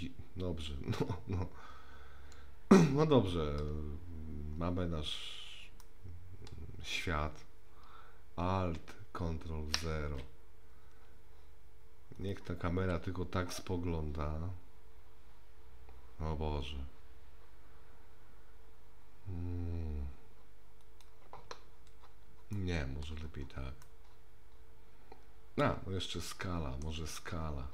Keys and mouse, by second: 5.8-6.5 middle drag, 9.8 ctrl+alt+KP_0, 12.2 click, 13.4 g, 22.5-23.0 middle drag, 23.9-26.8 middle drag.